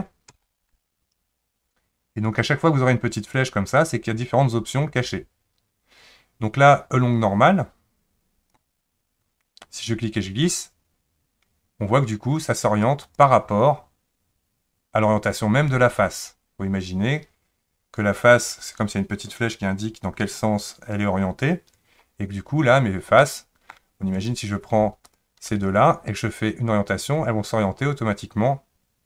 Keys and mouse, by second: 0.3 ctrl+z, 3.3-8.7 drag, 10.4 click, 10.9-13.2 drag, 23.2 middle click, 24.1 click, 26.4-29.0 drag.